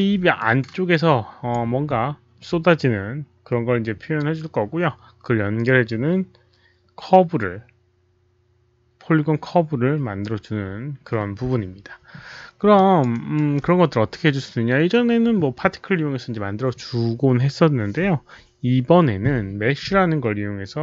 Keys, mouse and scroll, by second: 0.3-1.4 alt+drag, 3.8 click, 4.5 alt+click, 4.8 alt+click, 5.5 alt+click, 8.5 alt+click, 10.5 alt+click, 12.7 alt+drag, 13.0 alt+right drag, 13.6 alt+click, 16.2 alt+right click, 16.2 alt+click.